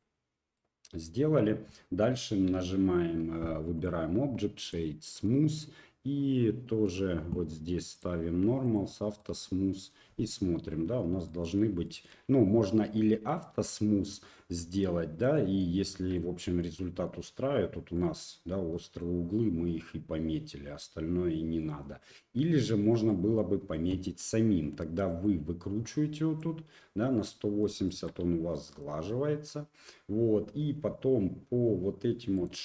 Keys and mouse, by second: 0.5-1.2 middle drag, 2.4 q, 3.8-4.7 drag, 5.2 middle drag, 7.9 click, 8.6 click, 9.2-9.9 middle drag, 11.2-11.6 drag, 11.8 shift+middle click, 13.2 middle click, 15.3 middle drag, 15.8 shift+middle drag, 16.1-16.6 middle drag, 16.8 middle drag, 17.9 middle click, 18.7-21.6 middle drag, 22.6 shift+middle click, 23.0-23.4 middle drag, 25.3-26.4 drag, 27.3-27.6 middle drag, 27.8 shift+middle drag, 28.3 Tab, 29.4 middle click, 32.3 click.